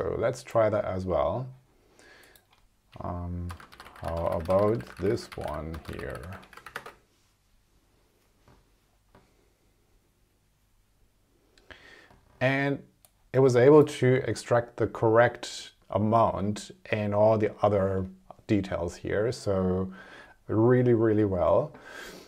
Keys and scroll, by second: 3.4 space, 4.5-6.4 typing, 6.7 super+Return.